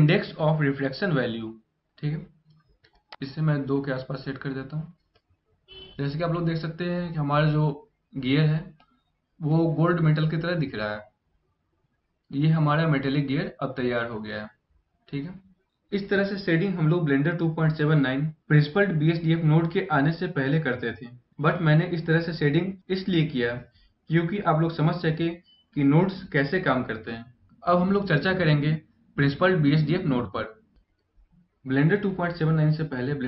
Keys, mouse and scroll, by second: 2.8 click, 5.2 middle click, 5.4 scroll down 1, 5.6 middle click, 8.4 middle click, 10.5 scroll up 2, 12.1-13.5 scroll down 3, 13.5 middle click.